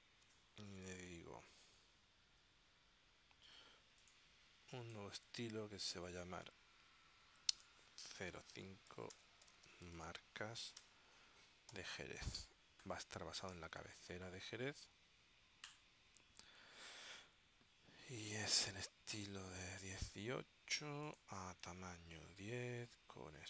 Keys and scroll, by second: 7.7 0, 8.1 5, 9.2-11.8 typing.